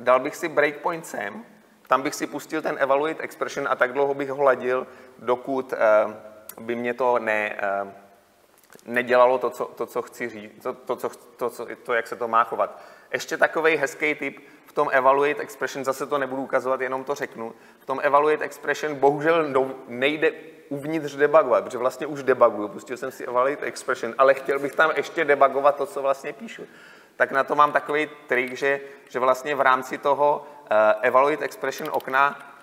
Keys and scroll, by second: 0.2 ctrl+b, 1.2 ctrl+F8.